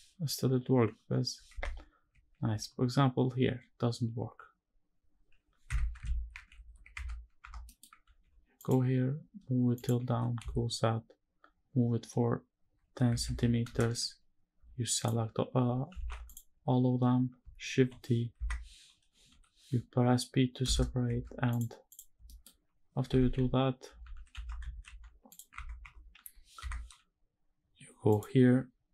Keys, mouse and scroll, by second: 2.2 ctrl+r, 5.8 ctrl+shift+z, 6.3 ctrl+z, 6.6 Tab, 7.1 Tab, 7.4 middle click, 7.7 ctrl+r, 9.4 click, 9.8 g, 10.1 z, 12.7 KP_1, 12.9 KP_0, 13.4 KP_Enter, 13.9-14.2 scroll up 2, 14.6 alt+click, 15.6 3, 15.9 alt+click, 16.4-17.1 scroll down 2, 17.4 shift+d, 18.0 Escape, 19.0 p, 20.7 Tab, 21.2 click, 21.6 click, 21.9 middle drag, 22.2-22.7 scroll up 2, 22.8 shift+`, 25.2 Tab, 25.5 Tab, 25.9 g, 26.4 Escape, 27.8-28.9 drag.